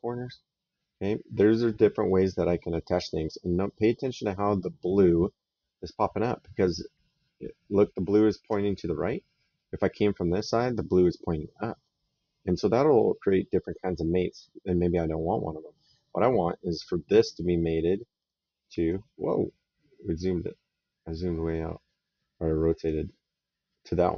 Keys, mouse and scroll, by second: 17.5 middle click, 18.1 right click, 20.1 right click.